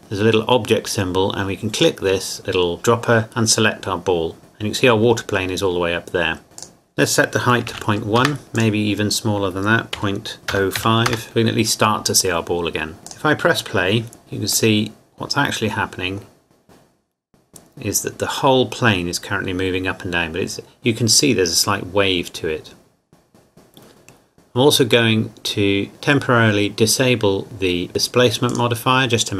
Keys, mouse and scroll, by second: 1.8 click, 4.4 click, 6.6 click, 7.6 KP_Decimal, 7.8 KP_1, 8.2 KP_Enter, 8.6 click, 10.0 KP_Decimal, 10.5 KP_0, 10.8 KP_5, 11.1 KP_Enter, 13.1 click, 14.8 middle click, 16.5-16.9 scroll down 1, 28.5 click.